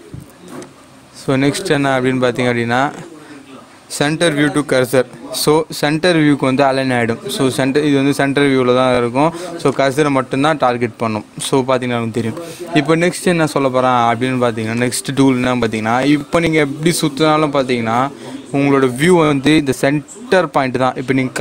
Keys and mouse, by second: 0.6 click, 4.4 click, 9.6 click, 9.7-14.7 drag, 14.7-21.4 drag.